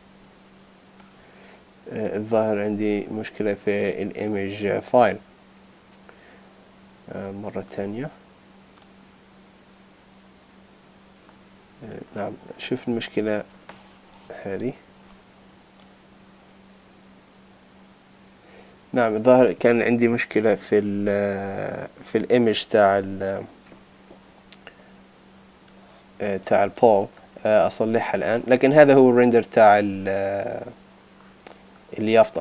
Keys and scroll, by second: 14.6 ctrl+BackSpace.